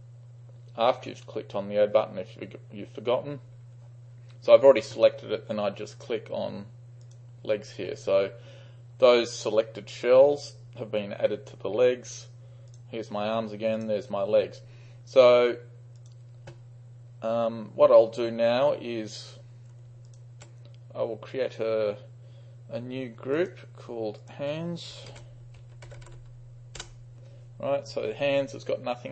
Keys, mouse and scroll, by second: 7.1 click, 12.8-17.6 drag, 20.1 ctrl+click, 23.4-23.8 drag, 24.2 click, 24.4 click, 25.1-26.6 typing, 25.6 click, 26.5 click, 26.9 shift+Return.